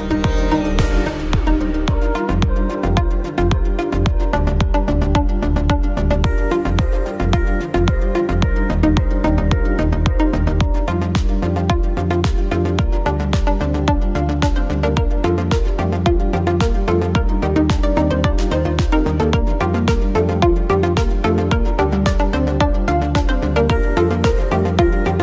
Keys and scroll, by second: 12.7 space, 15.9 space, 17.6 space.